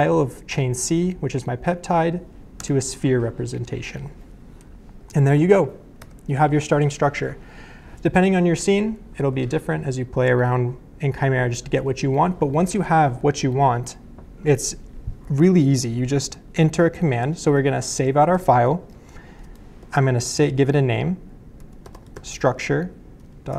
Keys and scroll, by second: 2.6 Return, 6.0 BackSpace, 16.9-23.5 typing.